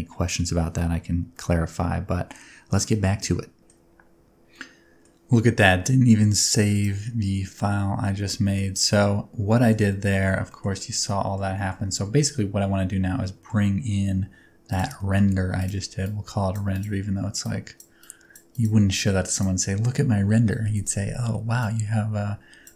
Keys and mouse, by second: 0.8-3.5 drag, 3.6 shift+middle click, 4.5 middle click, 7.4 click, 8.4 shift+middle click, 8.7 middle click, 9.6 shift+middle click, 9.9 middle click, 10.5 shift+middle click, 11.1 middle click, 11.5 shift+middle click, 12.0 Tab, 12.2-13.5 middle drag, 15.0 middle click, 15.6 click, 16.0-16.5 drag, 17.4 click, 18.0 click, 18.5 click, 19.3 click, 20.7 click, 21.6-22.6 drag.